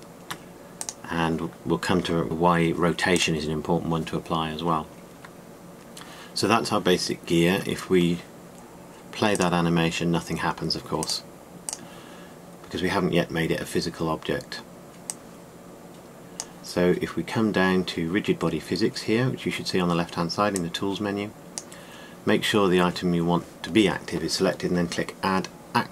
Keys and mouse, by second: 2.2 ctrl+a, 5.9-6.3 middle drag, 7.2-9.1 middle drag, 10.1 click, 13.1-15.9 drag.